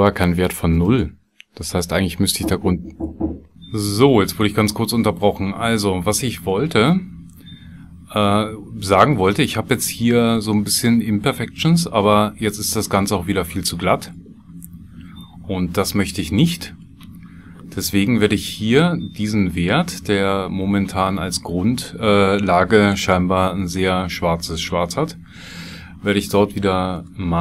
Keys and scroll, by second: 23.3 shift+a.